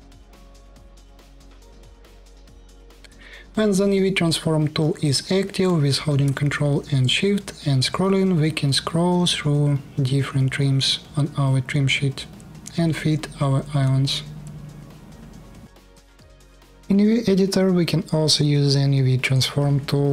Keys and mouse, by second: 15.6 KP_1, 18.9-20.1 drag.